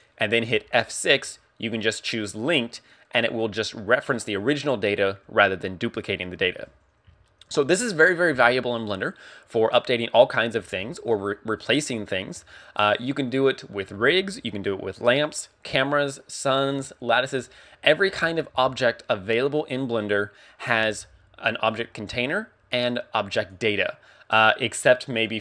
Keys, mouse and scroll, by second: 0.0 click, 0.6 F6, 7.2 shift+middle click, 7.6 scroll up 2, 8.3 x, 9.6 right click, 10.9 shift+middle click, 18.6 shift+a, 25.3 click.